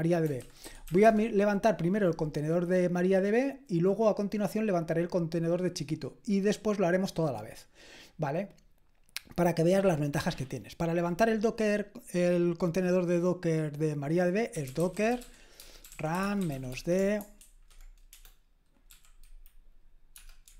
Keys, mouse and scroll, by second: 0.4-1.4 typing, 14.3-19.4 typing, 17.4 Escape.